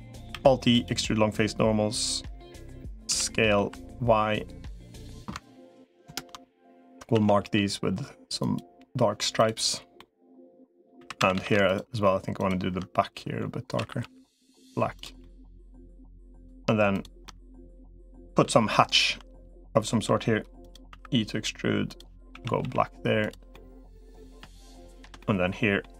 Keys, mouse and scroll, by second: 0.1 alt+e, 2.9 s, 5.9 ctrl+KP_Add, 6.9 a, 7.3 g, 9.8 middle click, 10.9 3, 11.1 a, 13.5 a, 13.9 g, 15.0 middle click, 16.1 click, 16.7 shift+click, 17.0 middle click, 17.9 middle click, 18.9 i, 20.7 e, 22.1 a, 22.5 g, 23.3 middle click, 24.5 shift+click, 25.0 middle click.